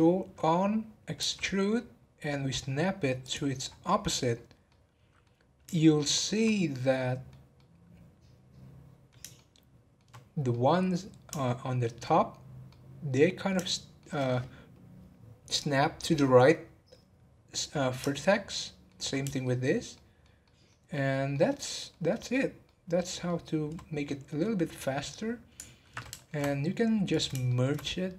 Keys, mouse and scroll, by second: 3.7 scroll up 5, 4.6 middle click, 5.4-5.8 scroll down 1, 5.8-16.8 shift+middle drag, 17.9 scroll down 1, 18.1-23.9 shift+middle drag, 23.9 scroll down 2, 24.4-26.4 middle drag, 26.4 scroll up 1, 27.1 click, 27.4 shift+middle click, 27.7 scroll up 1.